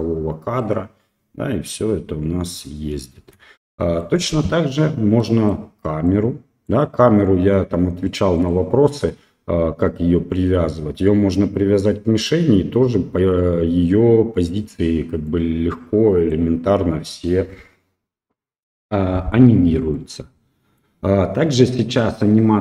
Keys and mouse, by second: 3.2 space, 3.7 middle drag, 5.2 middle click, 6.0-6.7 middle drag, 8.4 right click, 15.3-16.3 middle drag, 20.0-20.8 middle drag.